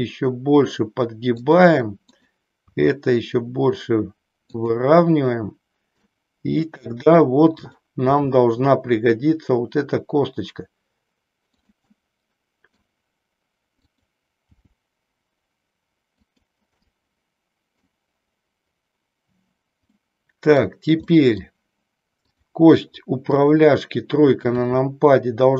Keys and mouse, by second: 1.5 click, 3.0 r, 4.6 click, 6.0-6.9 middle drag, 8.4 r, 11.5-11.9 drag, 12.0 middle click, 13.9 click, 14.6 g, 17.0-17.9 middle drag, 19.9 middle click, 21.0 middle click, 22.3 click, 23.4 KP_3, 24.6 r.